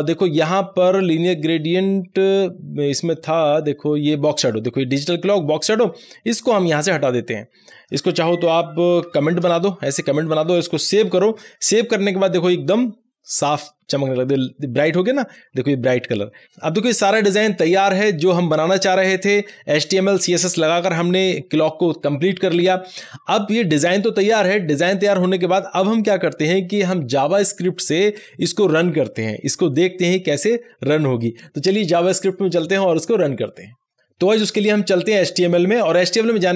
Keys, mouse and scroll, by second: 6.0-9.3 drag, 9.2 alt+shift+a, 10.1 click, 11.0 ctrl+s, 35.8 click.